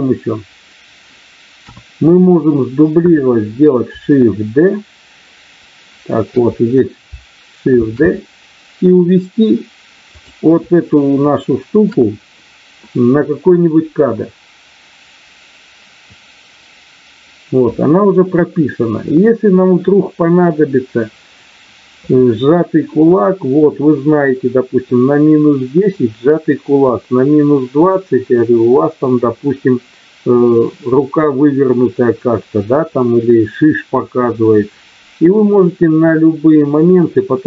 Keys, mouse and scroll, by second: 1.5 KP_1, 7.8 shift+d, 10.1 click, 10.9 shift+middle click.